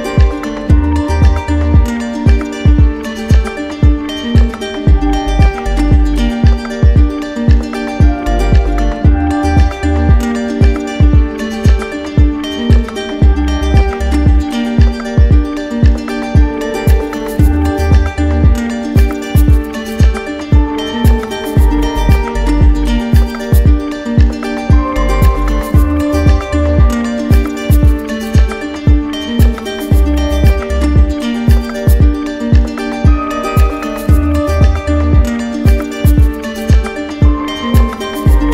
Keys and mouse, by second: 0.2 right click, 0.9 right click, 3.1 click, 3.4 ctrl+z, 6.2 right click, 12.2 click, 16.6 click, 17.1 right click, 19.6 click, 23.5 click, 25.7-26.8 right drag, 29.3 click, 30.2 right click, 31.4 click, 34.5 click, 35.7 right click, 36.5 shift+right click, 37.7 ctrl+d, 37.9 ctrl+d, 38.3 ctrl+d.